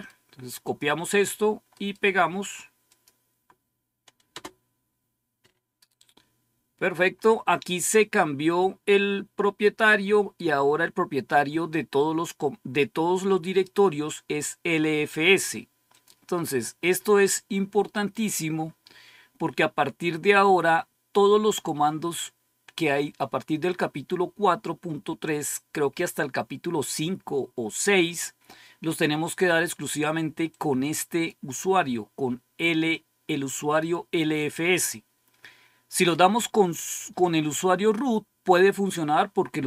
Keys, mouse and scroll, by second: 0.5 click, 2.8 click, 4.2 Return, 15.8 click, 16.6-17.3 scroll down 1, 20.3-20.9 scroll down 2, 30.4 click, 32.8 click.